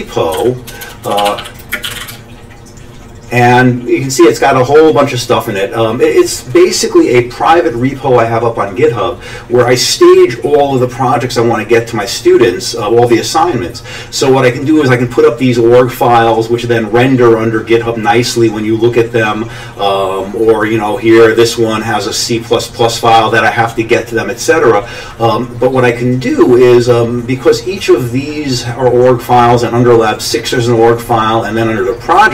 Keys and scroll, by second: 0.1-2.5 typing.